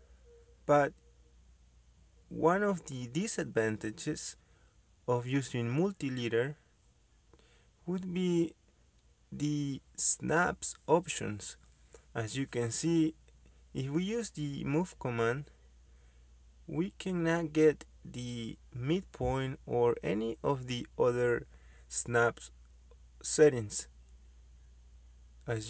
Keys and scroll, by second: 0.9 Escape, 5.9 m, 6.1 space, 11.2 Escape, 16.0 m, 16.2 space.